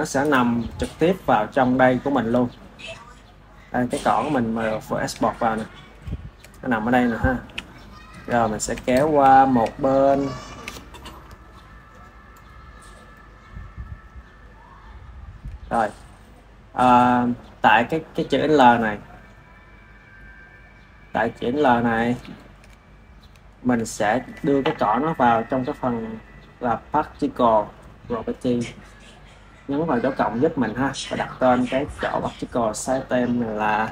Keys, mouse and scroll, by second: 0.1 click, 3.4 click, 3.7-7.3 middle drag, 7.3 ctrl+s, 7.6-8.6 ctrl+middle drag, 8.6 KP_1, 9.2-12.8 middle drag, 12.8-13.8 drag, 14.4-15.4 middle drag, 15.4-17.6 drag, 19.9-22.1 drag, 22.1-28.1 shift+middle drag, 28.1-30.9 drag, 31.2-33.9 drag.